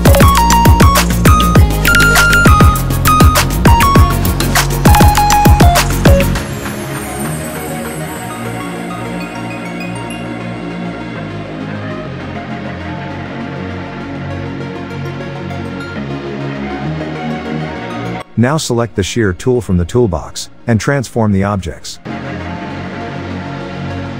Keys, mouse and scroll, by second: 1.6 shift+click, 2.8-3.1 click, 6.2-7.1 click, 14.0 click, 14.4 alt+scroll up 1, 14.6 click, 15.1 shift+click, 16.6 ctrl+z, 17.2 ctrl+g, 17.6 alt+scroll down 1, 19.1-20.2 drag, 20.5-21.2 alt+scroll up 1, 21.2-23.8 drag.